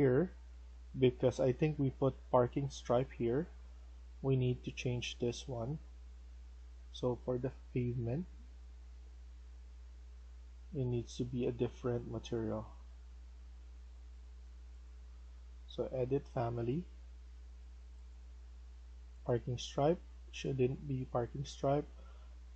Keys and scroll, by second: 0.2 Escape, 9.6 Escape, 13.7 Escape.